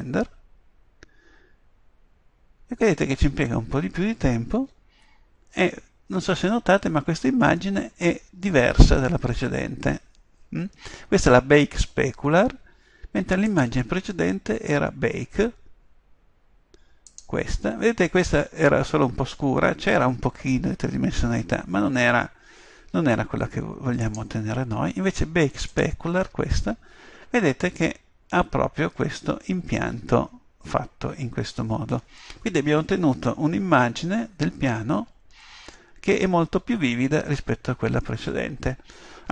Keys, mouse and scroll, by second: 1.5 click, 3.2 click, 4.6 Tab.